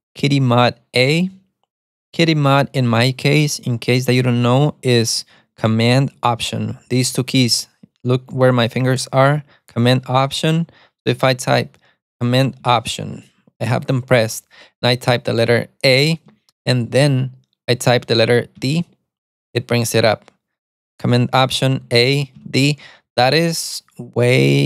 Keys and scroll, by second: 0.0-0.5 typing, 15.9 alt+super+a, 18.6 d, 21.9 alt+super+a, 22.5 d.